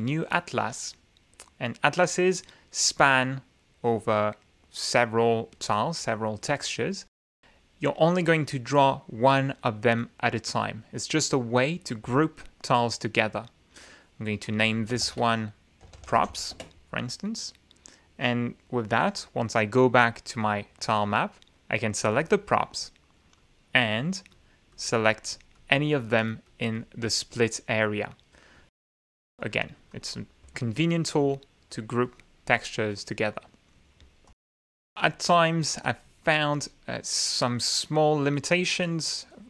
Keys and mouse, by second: 0.6 click, 3.8-6.8 drag, 15.5 click, 16.0 ctrl+a, 16.6-17.8 typing, 21.0 click, 23.0 click, 24.4 click, 25.3 click, 25.7 click, 26.9 click, 27.5-28.4 drag, 30.2 click, 30.7 click, 32.6 click, 32.7 click, 34.5 click, 35.4 click, 36.2 click, 37.0 click, 37.7 click.